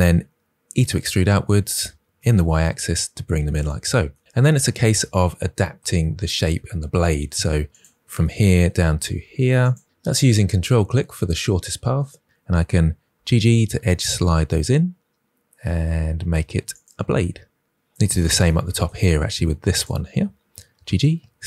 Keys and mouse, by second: 0.6 e, 2.1 y, 3.0 click, 4.9 middle click, 12.9 g, 13.1 g, 16.1 click, 19.7 click, 20.6 g, 20.8 g.